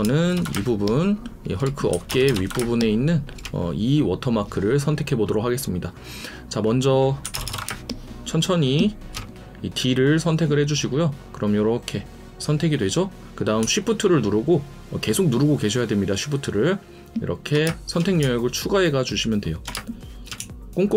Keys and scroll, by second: 0.5 space, 2.1 ctrl+KP_Add, 2.6 space, 7.2-7.6 typing, 13.6 ctrl+space, 17.6 shift+space, 19.7 shift+space.